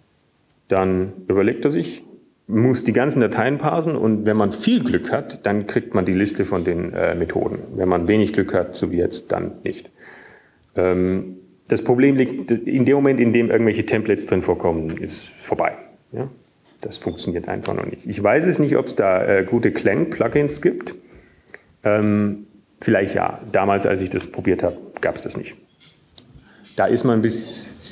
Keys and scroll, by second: 0.0-0.9 typing, 4.0 typing, 23.7 ctrl+g, 24.2 ctrl+g, 24.7 ctrl+g.